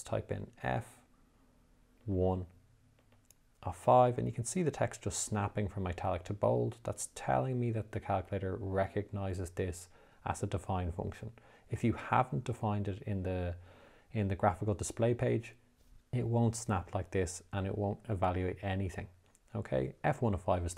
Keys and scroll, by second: 1.0 f, 2.4 1, 3.4 (, 4.8 5, 19.0 Return.